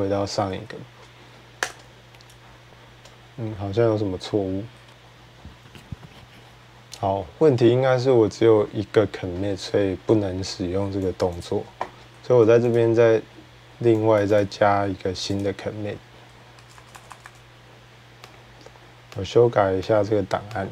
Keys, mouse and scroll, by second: 1.4 Return, 2.7-4.9 drag, 4.8 typing, 11.0 click, 11.2 click, 12.6 click, 14.0 click, 14.2 click, 15.2 click, 16.4-17.0 typing, 18.1 click, 19.0 click, 19.9 click, 20.5 click.